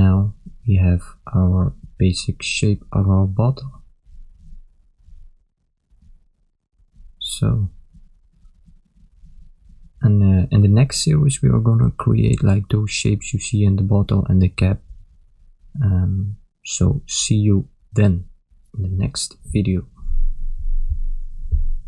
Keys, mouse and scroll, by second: 0.1 shift+middle click, 1.0 shift+middle click, 2.2 Tab, 3.4 a, 4.2 ctrl+middle click, 6.1 middle click, 9.1 KP_1, 9.7 ctrl+middle click, 10.5 shift+z, 13.1 shift+z, 14.4 ctrl+middle click.